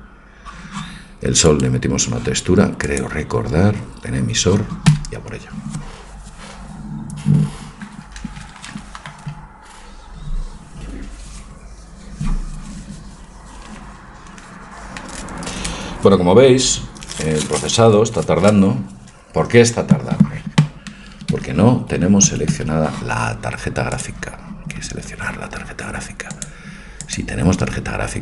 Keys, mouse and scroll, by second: 1.5-24.0 right drag, 22.5 Escape, 24.0 click, 24.9-25.9 middle drag, 27.7-28.2 drag.